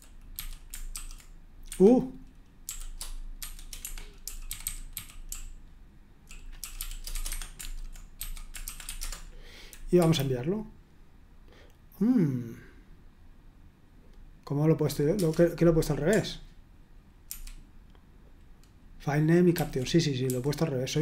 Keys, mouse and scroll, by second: 0.0-1.4 typing, 1.7 Escape, 2.6-10.0 typing, 15.1 Return, 17.3 ctrl+u, 19.6 ctrl+d, 20.3-21.0 typing.